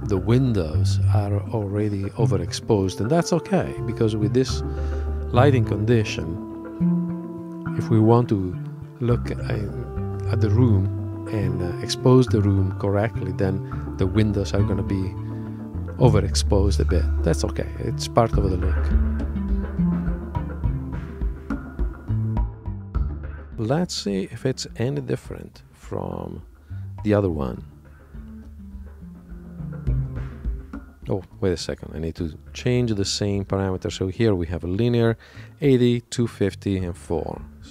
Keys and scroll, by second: 24.3 super+Tab, 30.0 super+Tab, 33.5 super+Tab.